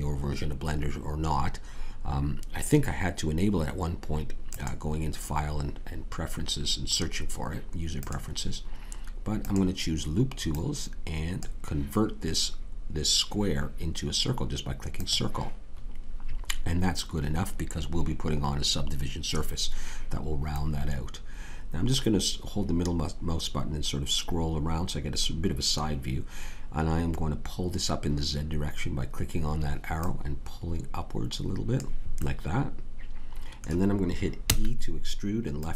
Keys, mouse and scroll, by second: 4.5-7.3 drag, 9.4-12.6 drag, 14.9-17.9 drag, 20.5-23.4 middle drag, 30.0-32.3 drag, 34.4 e.